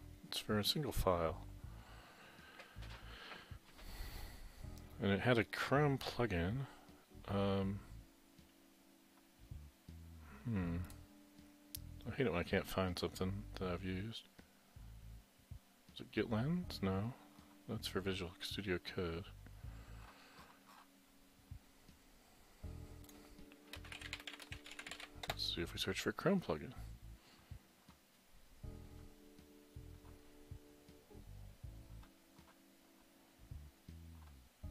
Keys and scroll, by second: 23.6-25.7 typing.